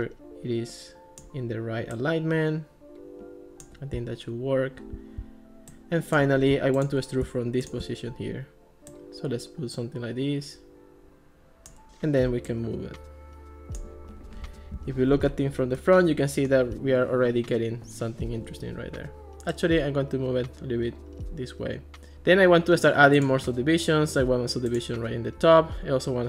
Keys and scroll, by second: 14.8 alt+r.